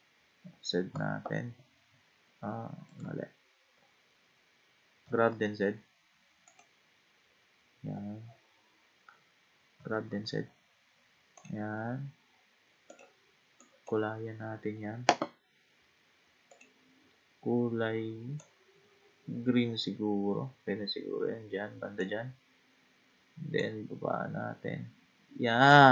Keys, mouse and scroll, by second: 0.9 z, 5.0 g, 8.3-9.7 scroll up 6, 9.7 g, 12.9 click, 13.6 click, 16.5 click.